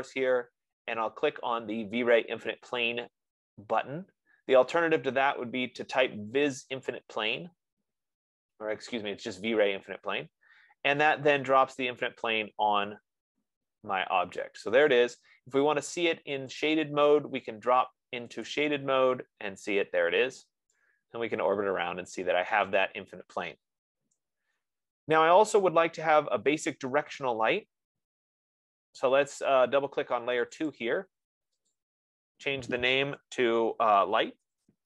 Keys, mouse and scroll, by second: 7.2-11.8 drag, 12.2 scroll, 13.0-13.6 scroll, 14.0-14.6 scroll, 14.8-15.5 scroll, 17.1 click, 19.0 click, 23.0 right click, 23.5-23.9 scroll, 24.3-25.5 scroll, 28.6 F15, 30.2 F15, 30.9 click, 32.1 click, 34.2-34.8 typing.